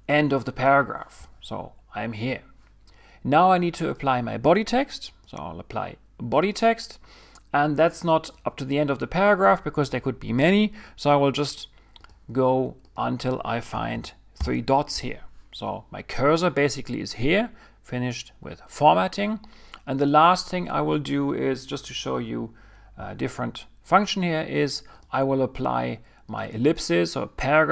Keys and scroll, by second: 13.9 ■, 13.9 ■, 14.4 ■.